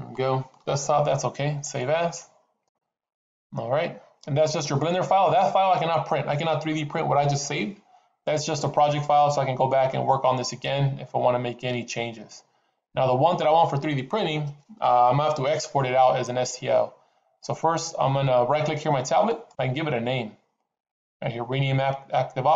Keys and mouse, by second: 19.2-22.5 right drag.